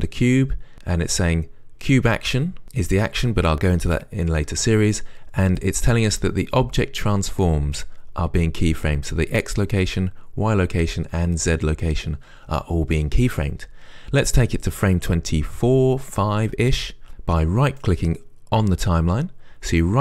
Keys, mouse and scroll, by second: 18.1-20.0 right drag.